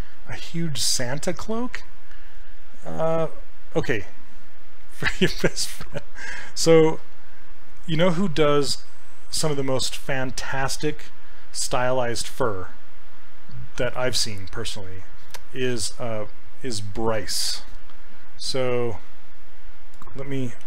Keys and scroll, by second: 20.5-20.6 typing.